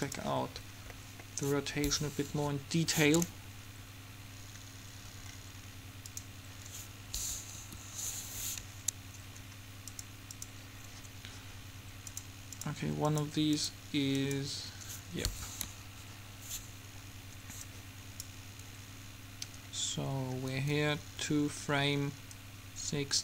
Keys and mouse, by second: 2.5 Home, 6.3-7.7 middle drag, 7.7 Home, 8.5-10.1 middle drag, 10.1 click, 11.2 click, 15.7 Home, 16.2-17.7 middle drag, 18.2 click, 19.2 click, 19.8-22.2 middle drag, 22.5-23.2 drag.